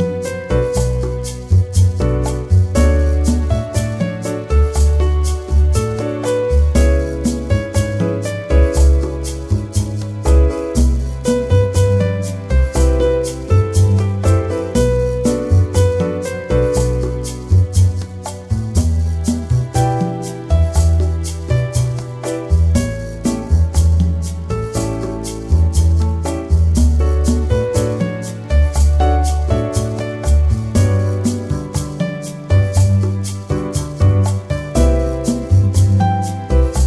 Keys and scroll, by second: 10.7 ctrl+z, 28.8 2, 29.3 5.